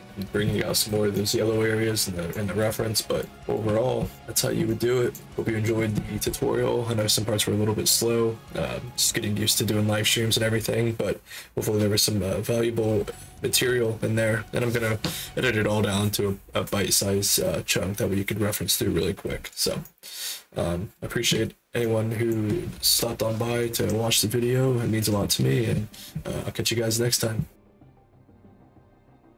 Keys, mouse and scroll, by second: 1.1-2.2 alt+drag, 2.6 alt+click, 3.3 alt+click, 4.1 alt+shift+right click, 4.6 alt+click, 5.3 alt+click, 19.8-21.2 shift+right drag, 21.7 alt+click.